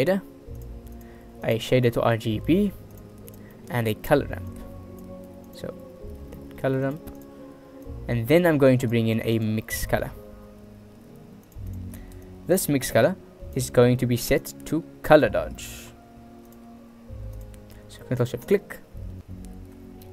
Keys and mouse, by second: 1.5 shift+a, 3.7 click, 4.6-5.2 drag, 5.5 shift+a, 8.0-8.6 drag, 8.8 click, 9.4 shift+a, 12.4-13.7 drag, 14.6-15.2 drag, 15.7 click, 15.7 right click, 16.6-17.6 drag, 18.8 ctrl+shift+click.